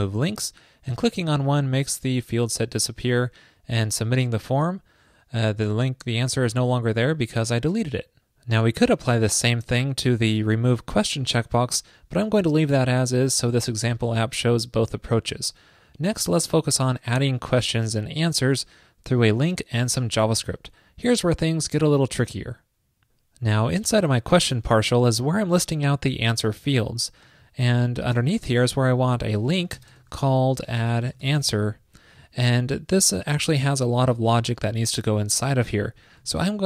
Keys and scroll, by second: 28.8 ctrl+shift+>, 36.5 alt+Left, 36.5 alt+Left.